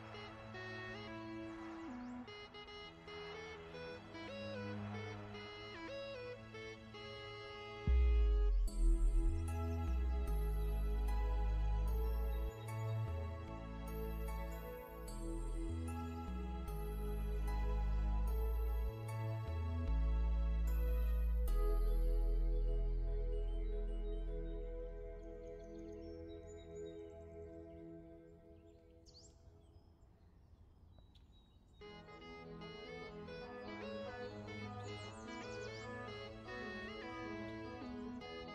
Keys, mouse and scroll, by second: 1.0 click, 3.5-4.2 scroll down 1, 4.2 click, 5.3 alt+shift+click, 6.1 click, 9.9 click, 12.5 alt+shift+click, 13.4 ctrl+z, 14.9 click, 16.1 KP_1, 16.3 KP_Enter, 17.6 v, 17.9 click, 18.2-19.0 scroll up 1, 19.0 click, 21.7 i, 22.4 click, 24.5 click, 25.7 v, 26.6 click, 28.0 v, 28.2 click, 29.5 alt+shift+scroll down 1, 31.9 click, 32.2-32.7 scroll up 2, 33.0-34.5 scroll up 1, 35.6 click, 36.9 shift+click, 37.5 click.